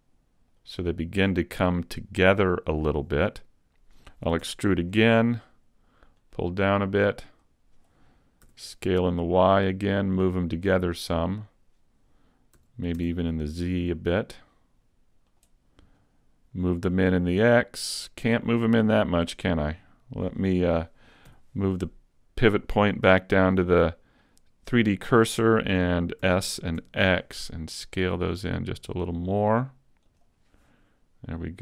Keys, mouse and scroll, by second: 0.7 click, 2.1 click, 4.5 e, 4.9 click, 6.2 click, 8.5 s, 10.7 click, 12.6 s, 15.4 click, 16.9 click, 17.0 click, 18.5-18.9 scroll up 2, 18.9 shift+middle click, 19.5-20.1 scroll up 1, 20.1 scroll up 1, 21.3 ., 26.2 s, 30.3 click, 31.2 scroll up 2.